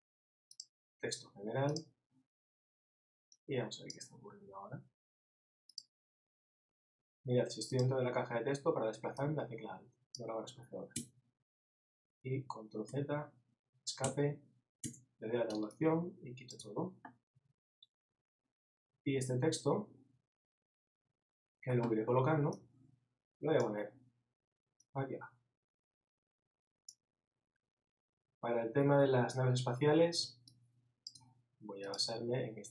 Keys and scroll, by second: 11.1 alt+Tab, 12.9 super+z.